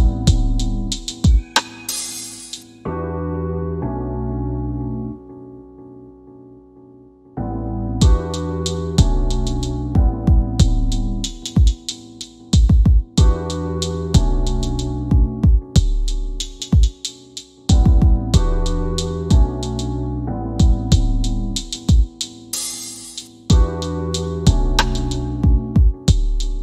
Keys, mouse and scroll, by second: 4.3 click, 7.0 w, 9.0 middle click, 10.6 middle click, 11.3 s, 12.2 click, 17.7 w, 19.9 click, 26.0 w.